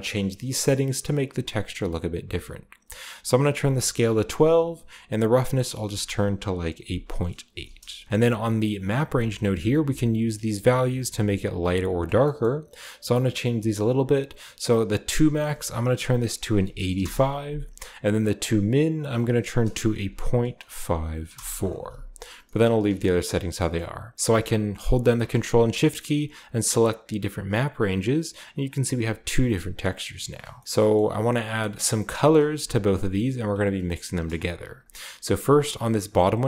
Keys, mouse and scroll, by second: 0.5-2.1 scroll up 1, 3.4 click, 3.6 typing, 4.2 click, 5.6 click, 6.7-7.7 typing, 7.7 Return, 8.7 click, 9.0 click, 9.7 click, 10.4 middle click, 11.0 click, 11.6 middle click, 12.2-13.4 middle drag, 15.2 click, 16.5 8, 16.9 5, 17.0 Return, 18.9-20.5 drag, 19.7-21.2 typing, 21.3 Return, 23.3-24.2 scroll down 1, 23.4 typing, 23.5 middle click, 24.2 click, 26.9 ctrl+shift+middle drag, 27.1-27.7 ctrl+shift+drag, 27.7 ctrl+shift+middle click, 27.8 ctrl+shift+click, 28.6 click, 29.4-29.9 drag, 30.0 click, 30.4-31.5 scroll down 1, 30.6-31.8 middle drag, 30.7 typing, 31.5-31.9 scroll down 1, 32.7-36.4 drag, 33.4 typing, 34.6 g.